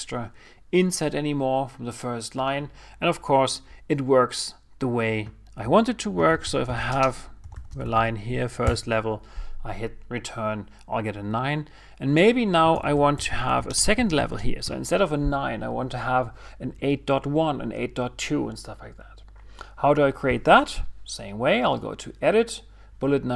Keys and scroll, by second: 8.3 shift+f, 10.6 Return, 14.7 shift+s.